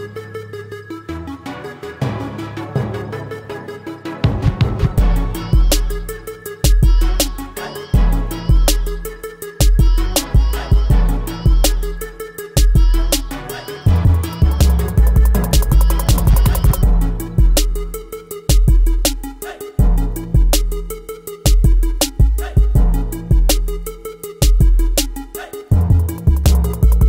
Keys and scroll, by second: 0.4-4.8 typing, 5.2 ctrl+Return, 6.1 v, 8.4 space, 10.8 ctrl+t, 15.4 v, 17.2 v, 23.7 Up.